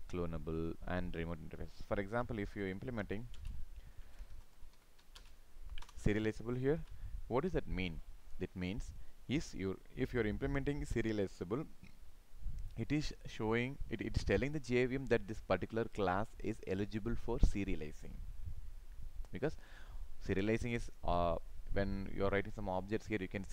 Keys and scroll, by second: 3.4 ctrl+space, 6.8 ctrl+s.